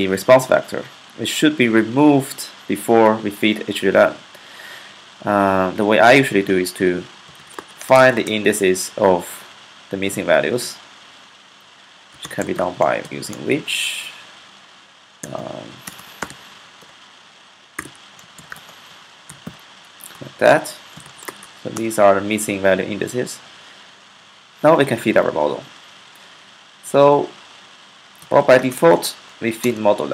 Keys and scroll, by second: 6.8-8.0 typing, 11.5-13.5 typing, 14.8-21.5 typing, 27.8-30.1 typing.